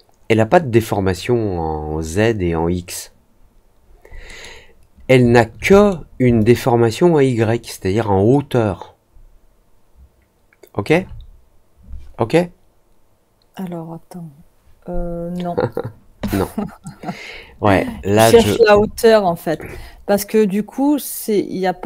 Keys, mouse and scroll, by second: 4.2 middle click, 5.7 middle click, 6.3-10.8 alt+drag, 18.9 alt+middle click.